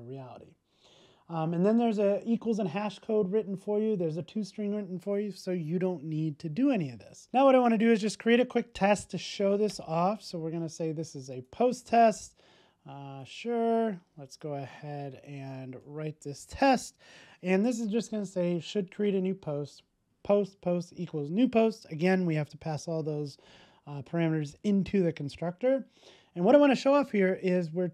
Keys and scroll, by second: 7.2 super+s, 15.9 super+v, 16.2 super+s.